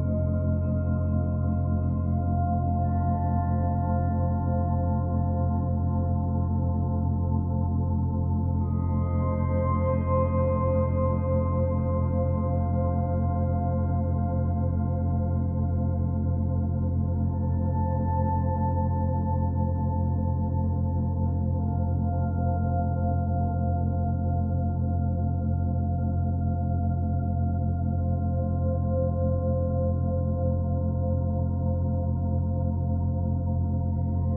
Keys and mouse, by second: 3.9 drag, 5.0 click, 5.7 click, 7.9 click, 9.2 typing, 9.6 Escape, 10.2-11.0 drag, 11.7 click, 13.5-14.7 drag, 16.1-17.0 drag, 17.9 Tab, 19.6-20.4 drag, 20.9 /, 22.1-27.6 alt+drag, 28.1 ctrl+alt+click, 28.7-31.8 alt+shift+drag, 32.7 click.